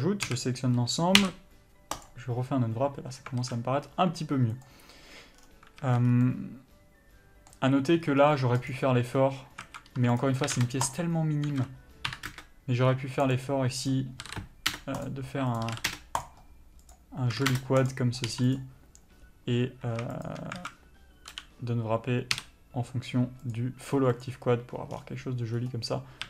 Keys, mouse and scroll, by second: 0.1 alt+a, 2.4 u, 3.7 alt+a, 5.7-6.1 scroll down 1, 6.1 a, 6.4 scroll up 1, 6.6 middle click, 9.0 click, 10.0 alt+a, 10.5 click, 10.8 s, 11.3 click, 11.8 s, 13.6 click, 14.6 s, 15.3 click, 16.0 s, 16.5 click, 17.7 s, 18.2 click, 20.9 alt+a, 21.6 l, 24.6 u.